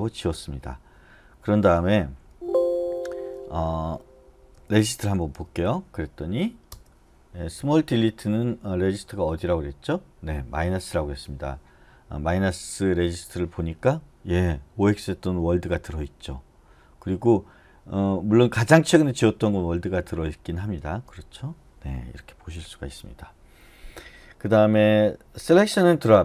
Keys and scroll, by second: 2.3 Escape, 4.4-5.8 typing, 6.7 Return, 20.8 space, 22.5 q.